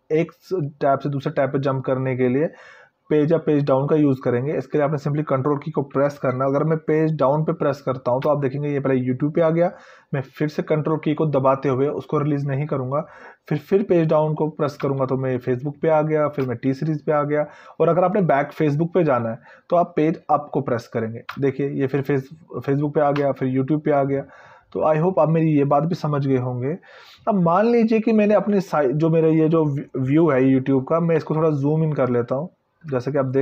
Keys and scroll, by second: 8.6 ctrl+Page_Down, 15.0 ctrl+Page_Down, 16.6 ctrl+Page_Down, 21.6 ctrl+Page_Up, 23.4 ctrl+Page_Up.